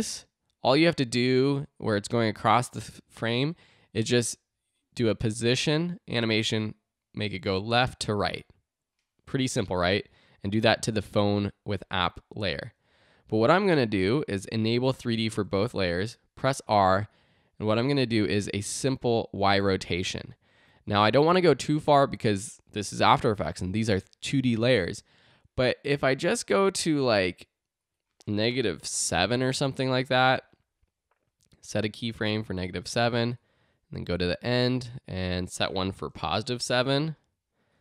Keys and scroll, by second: 15.4 r, 20.7 super+z, 28.6-29.6 typing, 36.1 7, 36.3 Return.